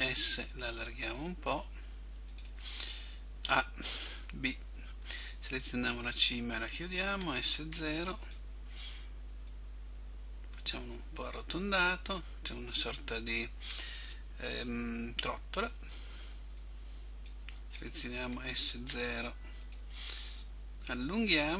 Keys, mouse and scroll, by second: 2.5 click, 3.6 a, 4.3 b, 7.3 s, 8.4 click, 9.6 click, 15.8 b, 19.9 click, 21.0 click.